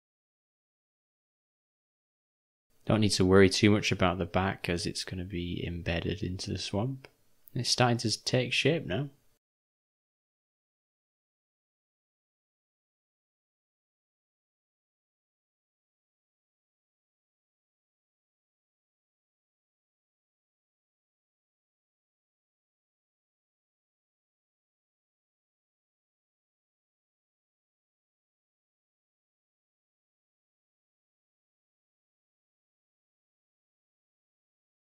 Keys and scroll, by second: 20.0-22.1 typing, 23.3 [, 23.5 [, 25.7 ], 25.9 ], 26.0 ], 26.2 ], 31.6 o, 33.3 ctrl+s.